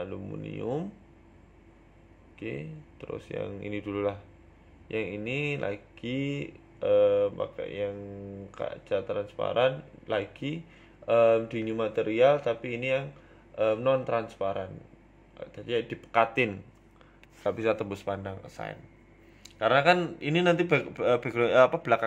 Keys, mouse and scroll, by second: 0.6 scroll up 1, 1.3 right click, 1.8 Tab, 2.9 right click, 3.8 click, 4.9 click, 8.0 click, 8.4 click, 9.6 BackSpace, 9.9 BackSpace, 13.5 shift+click, 15.9 scroll down 2, 16.6 click, 17.0-17.9 scroll down 5, 17.1 Tab, 17.5 shift+middle click, 17.9 middle click, 18.1-18.5 scroll up 6, 18.5 middle click, 19.1 right click, 19.9 right click, 20.1 Tab, 20.5 shift+middle click, 20.9 scroll up 1, 21.6 scroll up 2, 21.7 right click.